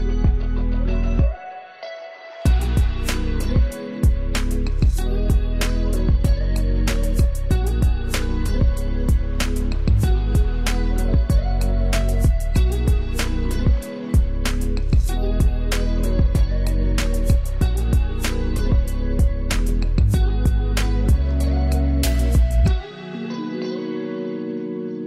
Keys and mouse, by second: 4.1 =, 11.1 =, 12.1 click, 13.1 ctrl+z, 14.0 ctrl+click, 14.3 ctrl+space, 16.9 ctrl+t, 17.9 ctrl+space, 18.2 ctrl+alt+click, 20.0-25.0 ctrl+drag.